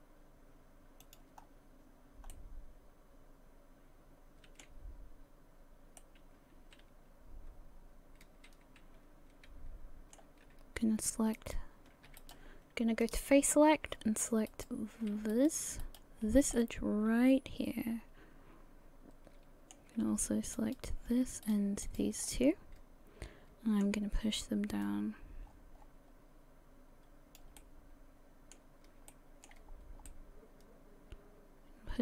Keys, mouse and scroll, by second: 1.4-2.0 scroll down 1, 2.0 scroll up 1, 2.3 middle click, 6.0 middle click, 11.4 alt+right click, 12.2 alt+right click, 13.1 click, 14.5 alt+right click, 15.3 alt+right click, 15.8 alt+right click, 16.6 middle click, 20.6 alt+shift+right click, 21.4 shift+right click, 21.9 shift+right click, 22.3 middle click, 24.8 click, 27.6 middle click, 29.1 shift+middle click, 29.7-30.1 scroll up 1, 30.1 middle click.